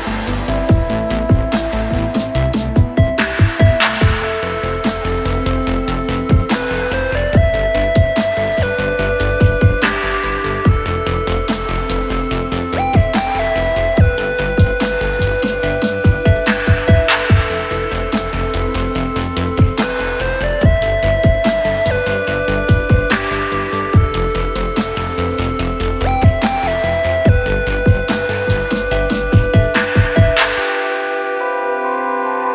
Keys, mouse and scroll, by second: 2.2 click, 4.1 click, 5.0-6.6 drag, 10.3 click, 12.6-15.6 drag, 19.1 click, 19.7 click, 20.2 scroll down 2, 20.5 alt+click, 20.8 scroll up 2, 21.1 alt+middle click, 21.3 middle click, 21.3 alt+scroll up 1, 21.6 alt+click, 22.4 right click, 23.5 click, 25.4 right click, 31.1 click, 32.3 click.